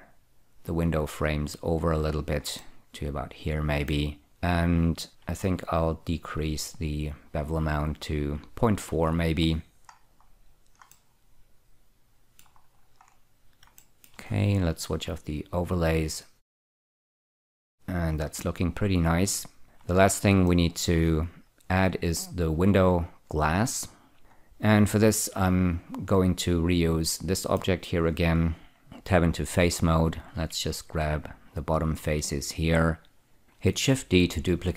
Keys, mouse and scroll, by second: 2.9-4.2 middle drag, 5.1 click, 6.2-9.0 shift+drag, 9.3 click, 9.9-10.7 scroll up 7, 11.2 middle click, 12.9-13.9 scroll down 8, 14.1 shift+middle click, 16.7 click, 17.3-20.0 middle drag, 20.8 shift+middle click, 24.2 click, 24.3-25.8 scroll up 1, 25.8 click, 27.4 shift+middle click, 28.8 scroll up 1, 28.9 Tab, 29.0 3, 30.4 click, 31.2 shift+click, 32.5 shift+click, 34.4 shift+d.